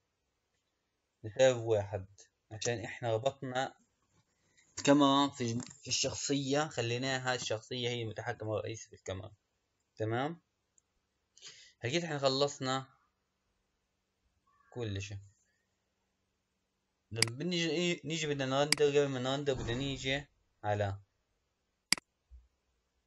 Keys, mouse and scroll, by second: 2.7 space, 17.2 click, 21.9 click.